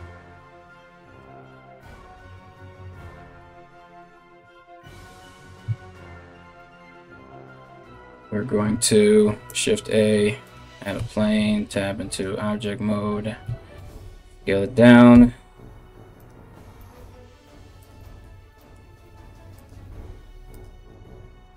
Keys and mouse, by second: 2.8 KP_1, 8.9 shift+a, 10.6 Tab, 11.7 right click, 13.1 a, 13.4 s, 14.8 KP_Decimal, 15.8 right click, 16.9 e, 18.5 e, 19.4 e, 21.3 right click.